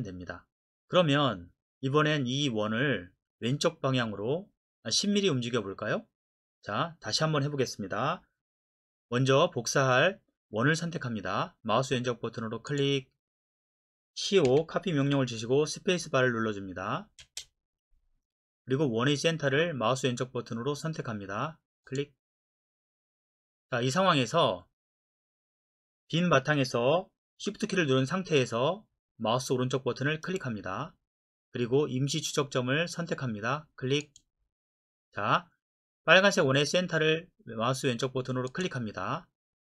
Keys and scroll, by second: 14.5-15.1 typing, 17.2 space.